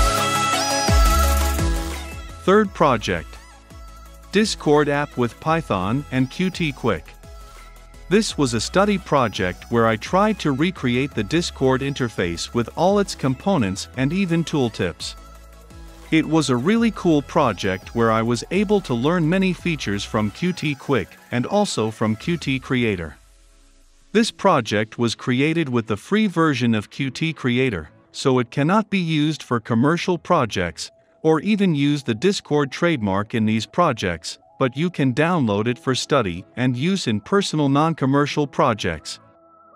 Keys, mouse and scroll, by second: 5.5-11.5 drag, 12.2 shift+h, 12.5 i, 12.8 Return, 17.8-25.6 drag, 25.6-26.4 middle drag, 26.4-39.7 drag.